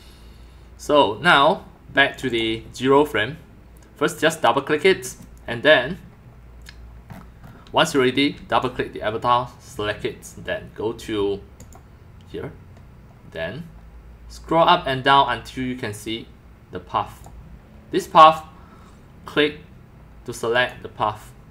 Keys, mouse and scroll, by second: 2.1 click, 2.3 click, 4.1 click, 4.2 click, 7.6-8.9 typing, 7.9 click, 11.6 click, 14.5-16.4 drag, 16.9 click, 18.8 right click, 20.5 click.